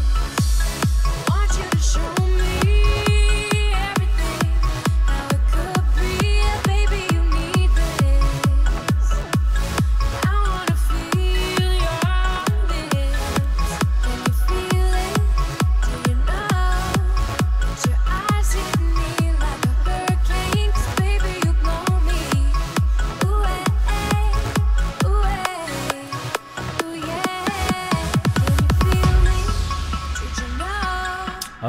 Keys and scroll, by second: 31.2 space.